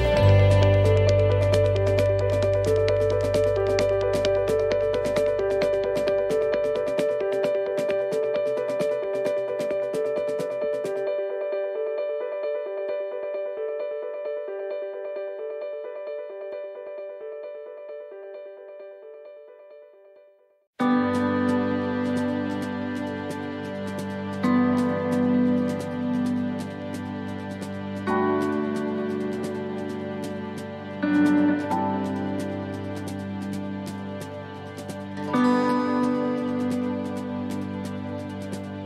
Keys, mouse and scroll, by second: 0.3-1.2 scroll down 3, 1.2-3.7 scroll down 1, 5.4 click, 7.0 click, 8.3 click, 9.4-9.9 scroll up 5, 9.9-10.6 scroll down 1, 10.6-11.3 scroll down 1, 11.3 right click, 19.5 right click, 21.2 click, 22.5 click, 26.2 click, 29.8 click, 32.1 click, 32.8 right click, 33.6 right click, 35.3 click, 37.9 shift+middle click.